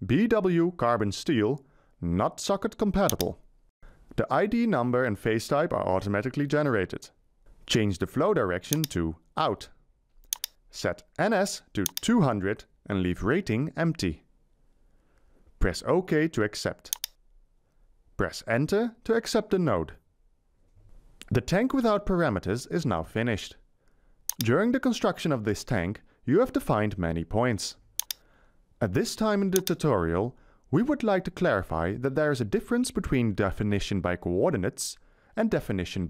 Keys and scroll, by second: 12.1-13.4 typing, 19.0 Return.